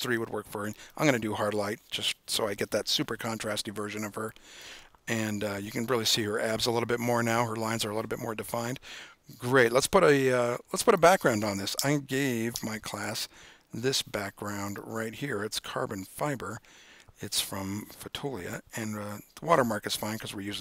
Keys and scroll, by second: 12.7 super+o.